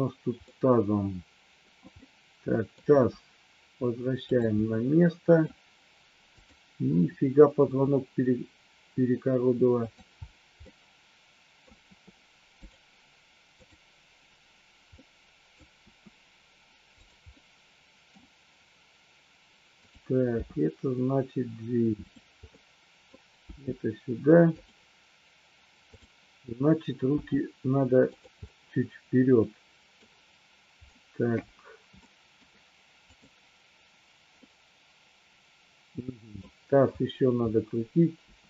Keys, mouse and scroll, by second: 0.4-1.5 middle drag, 2.0-2.7 middle drag, 2.9 r, 4.2 click, 4.6 middle click, 6.4 click, 7.6 r, 10.7 middle click, 11.7 r, 13.6-14.4 drag, 14.9-15.6 middle drag, 15.7 r, 17.0 click, 17.2-18.1 middle drag, 19.7 click, 20.7 g, 22.0 click, 22.5-23.1 middle drag, 22.5 scroll up 1, 23.5 g, 24.5 click, 25.9-26.7 drag, 27.1 g, 28.1 click, 28.4-30.0 middle drag, 32.0 shift+middle click, 34.4-36.4 middle drag, 38.1 r.